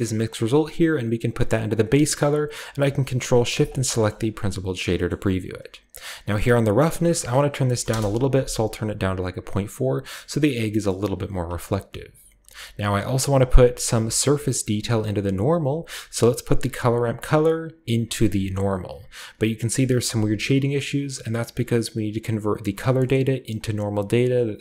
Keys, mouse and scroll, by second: 0.3-1.7 drag, 0.3-1.7 scroll up 1, 3.5 ctrl+shift+click, 4.1 click, 5.0-6.4 scroll up 1, 6.4 click, 6.7 click, 6.8-7.7 scroll up 1, 7.7 typing, 7.8 Return, 8.9 scroll down 1, 9.5 scroll down 1, 9.9 middle click, 10.6 middle click, 11.2 click, 15.5 click, 17.3-18.4 drag, 20.8-22.9 middle drag, 20.8-22.9 scroll up 1, 23.1-24.5 middle drag, 24.4-24.6 drag.